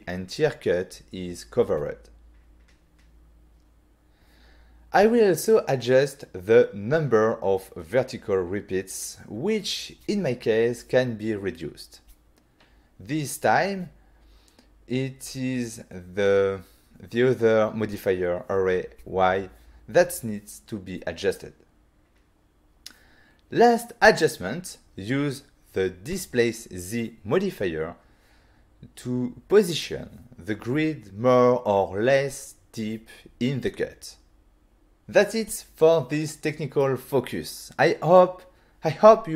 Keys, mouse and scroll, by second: 0.8 click, 6.1 double click, 7.4 click, 12.6 click, 15.0 click, 16.0 middle click, 16.7 middle click, 17.3 g, 18.4 z, 19.8 y, 23.0 click, 23.5 middle click, 24.0 middle click, 25.0 click, 26.7 click, 29.4 click, 34.3 middle click, 36.8 middle click, 37.9 click, 38.4 click, 39.2 middle click.